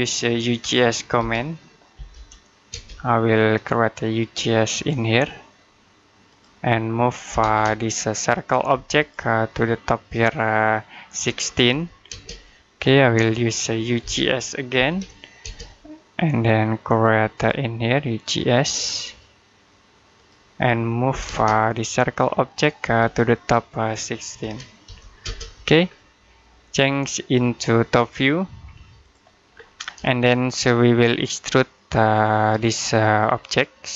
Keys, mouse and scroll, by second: 1.0-2.5 typing, 3.6 click, 7.1 typing, 8.2 click, 8.6 space, 8.8 click, 11.1-11.9 typing, 13.0 middle click, 13.9-15.3 typing, 17.2 click, 21.0 typing, 22.3 click, 22.7 space, 22.9 click, 24.3-25.1 typing, 25.7-27.8 scroll down 1, 27.8 click, 29.4-29.8 scroll down 1, 29.9 middle click, 33.2-33.9 scroll up 1.